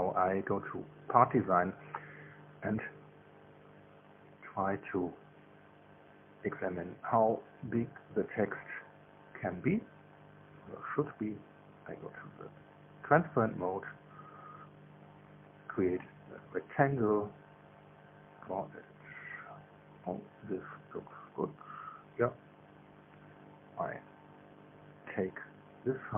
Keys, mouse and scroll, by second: 0.3 click, 2.7 click, 5.0 click, 6.7 click, 10.5 click, 11.4 click, 12.3 click, 16.4 click, 19.2 click, 22.8 click, 23.7 right click, 24.7 click.